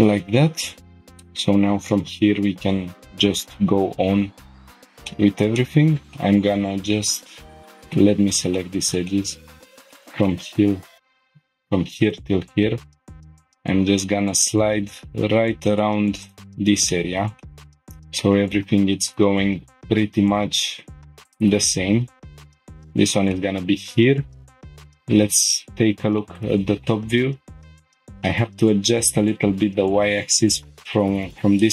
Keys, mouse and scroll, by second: 0.4-1.1 scroll down 2, 0.9 middle click, 5.1 shift+middle click, 5.6 middle click, 7.5 middle click, 7.5 click, 8.5 shift+middle click, 9.7 scroll down 2, 9.9 shift+middle click, 10.3 middle click, 11.2 ctrl+click, 12.0 click, 13.2 g, 13.4 x, 16.2 click, 16.5 scroll down 1, 16.9 shift+middle click, 17.4 middle click, 19.1 click, 20.9 g, 20.9 x, 22.5 click, 22.8 scroll down 1, 23.3 shift+middle click, 23.9 scroll down 1, 24.9 click, 25.7 scroll up 1, 26.2-26.9 shift+middle drag, 27.1 scroll up 1, 29.0 g, 29.5 y.